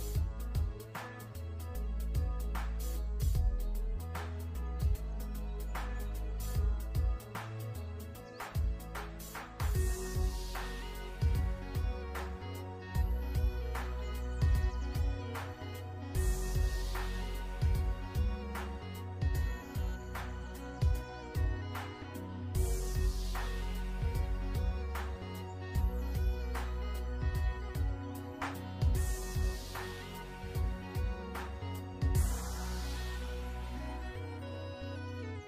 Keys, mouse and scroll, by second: 2.3 v, 2.7 click, 3.1 BackSpace, 5.1 alt+shift+click, 5.7 click, 7.3 i, 7.4 click, 7.7 v, 7.9 click, 9.6 shift+click, 10.4-10.9 alt+shift+scroll down 2, 10.9 click, 12.2 click, 12.5-13.3 scroll up 1, 13.3 click, 15.7 alt+shift+scroll up 2, 16.1-17.0 ctrl+scroll down 2, 18.2 i, 18.3 click, 18.8 v, 19.4 click, 19.6 alt+shift+scroll down 2, 20.1 ctrl+z, 20.2 typing, 20.9 click, 21.1 alt+scroll up 2, 21.8 ctrl+z, 22.1-23.3 typing, 24.4-24.8 ctrl+scroll up 2, 24.8 click, 29.4 alt+shift+scroll down 2, 31.4-31.9 scroll up 2, 32.4 click, 33.2 click, 35.3 scroll up 1.